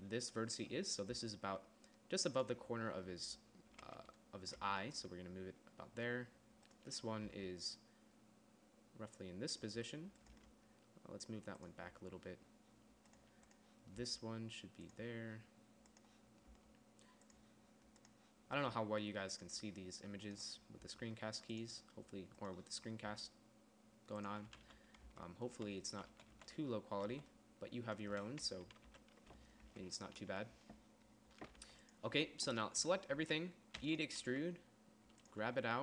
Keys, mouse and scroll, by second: 0.9 g, 1.6 g, 7.7 g, 10.8 g, 14.4 g, 17.0 g, 18.9 g, 21.3 g, 23.5 g, 25.0 z, 25.5 Tab, 26.1 z, 26.5 z, 26.8 z, 27.5 z, 29.3 KP_3, 30.3 Tab, 32.1 g, 33.3 a, 33.6 a, 34.3 e, 34.7 s.